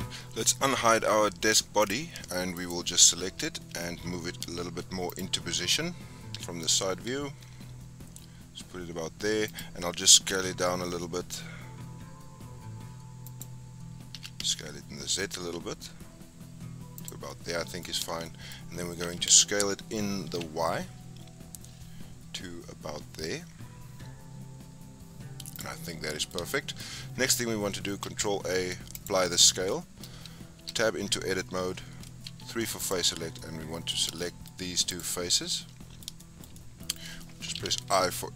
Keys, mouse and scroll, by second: 1.8 click, 2.5 click, 5.0 click, 5.7-6.3 scroll up 3, 6.3 g, 10.1 s, 14.1 s, 17.2-17.9 middle drag, 17.9-18.2 scroll up 3, 18.2 shift+middle click, 19.0 s, 25.8-26.8 middle drag, 26.8-28.0 scroll up 3, 28.0 ctrl+a, 29.7-30.5 shift+middle drag, 30.5 Tab, 32.2 3, 32.7 click, 33.3-34.8 middle drag, 34.8 shift+click, 35.3 scroll down 1, 35.4-37.5 middle drag, 37.5 i.